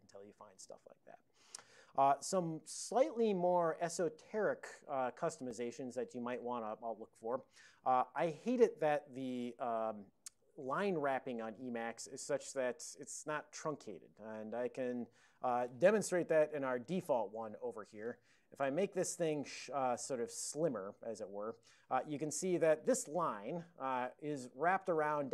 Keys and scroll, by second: 16.6 super+j, 18.7 super+Left, 21.3 super+Down.